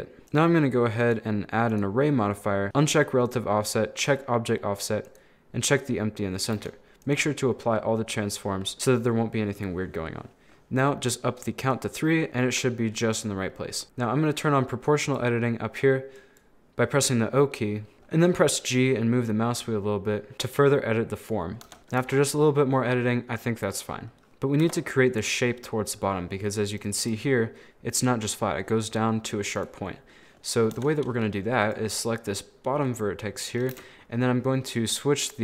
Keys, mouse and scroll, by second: 0.2 right click, 0.3 click, 1.0-2.7 drag, 3.3 click, 4.0 click, 6.6 ctrl+a, 7.7-11.6 middle drag, 11.6 click, 12.2-13.8 middle drag, 13.8 click, 15.1-17.9 drag, 17.9 g, 21.7 Tab, 21.8 middle click, 22.0 z, 22.3-23.4 middle drag, 23.4 scroll down 2, 23.5-24.6 middle drag, 24.7 Tab, 26.0-27.1 middle drag, 30.0 scroll down 1, 30.1 middle click, 30.4-30.8 scroll up 3, 30.8 Tab, 30.9 middle click, 31.6 right click, 31.9-33.7 middle drag, 33.7 KP_1, 34.8 click.